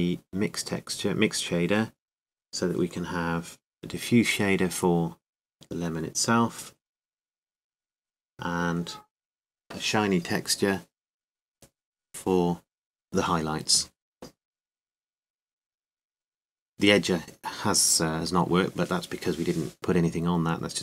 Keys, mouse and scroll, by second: 15.3-16.6 drag, 20.6-20.8 drag.